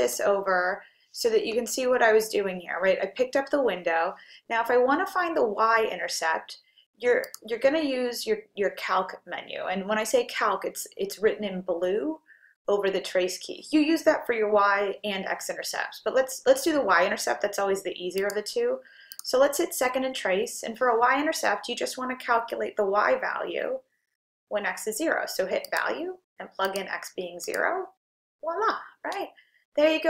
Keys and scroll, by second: 6.9-7.7 typing, 25.5-26.7 typing, 27.5 Return.